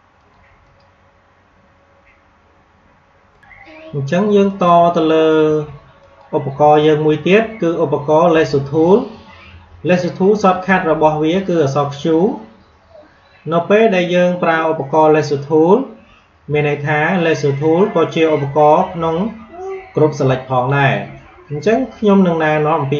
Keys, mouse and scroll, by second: 3.3 click.